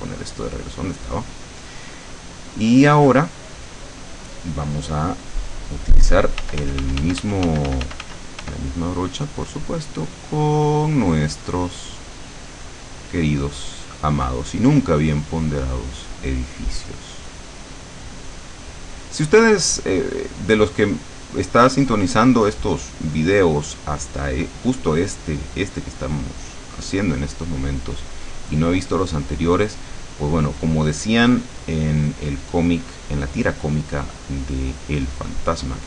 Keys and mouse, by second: 0.1 click, 2.0 click, 2.5 middle click, 2.9 click, 6.5 f, 8.9-14.4 drag, 14.8-23.7 drag, 24.4-35.8 drag.